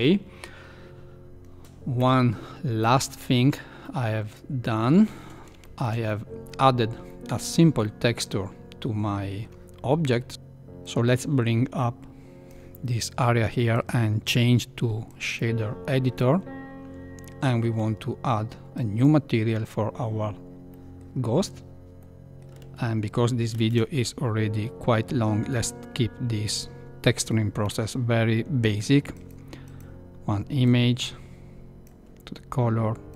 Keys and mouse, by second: 1.9 KP_1, 3.2 shift+middle click, 3.8-5.1 middle drag, 5.6 shift+middle click, 6.1 middle click, 7.2 shift+middle click, 7.9-9.5 middle drag, 10.8-12.5 drag, 13.7-15.3 drag, 18.7-20.0 drag, 20.7 middle click, 22.0 middle click, 23.6 shift+a, 30.6-31.9 drag, 33.1 click.